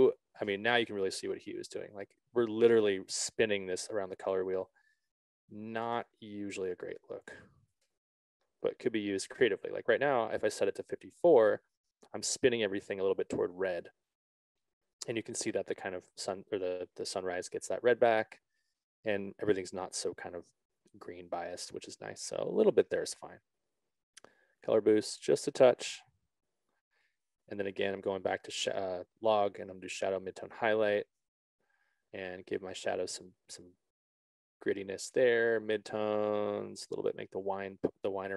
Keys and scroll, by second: 6.4 Return, 8.2 0, 8.4 Return.